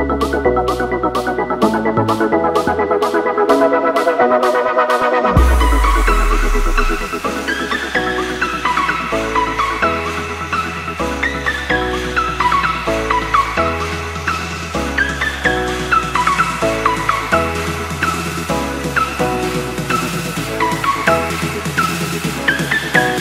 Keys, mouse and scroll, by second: 0.3 /, 8.8 click, 22.9-23.2 alt+scroll up 1.